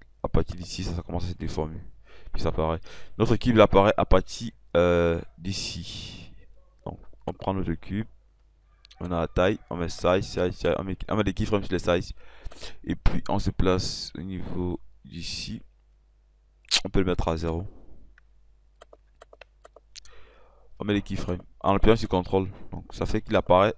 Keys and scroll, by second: 18.3 KP_0, 18.5 0.